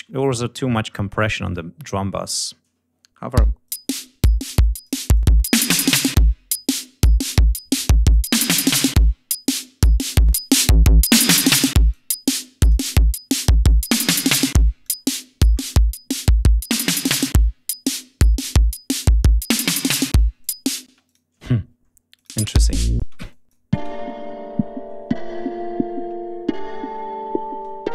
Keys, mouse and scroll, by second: 0.2-1.0 scroll down 2, 1.3 click, 3.2 l, 3.5 right click, 4.5 click, 5.0-7.6 drag, 8.0-9.6 drag, 10.0-12.0 drag, 12.3 click, 13.5 click, 14.7-18.8 drag, 19.3 click, 20.3 click, 20.8 space, 21.0 click, 21.3 ctrl+scroll down 2, 22.0 click, 22.3 space, 22.5 ctrl+scroll down 2, 22.9 ctrl+space, 23.2 ctrl+click, 23.6 ctrl+space, 27.7-27.9 ctrl+scroll up 4.